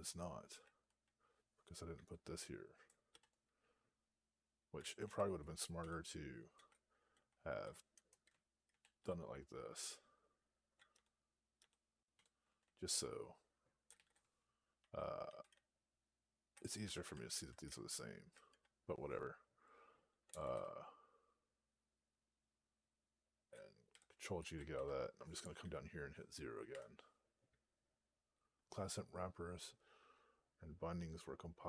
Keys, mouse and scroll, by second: 0.0 Right, 1.3 Down, 3.0 <, 5.4 ctrl+a, 5.7 ctrl+k, 6.9 ctrl+p, 8.9 ctrl+y, 13.8 ctrl+k, 13.8 ctrl+s, 18.0 Right, 18.9 Down, 23.8 ctrl+g, 26.6 0.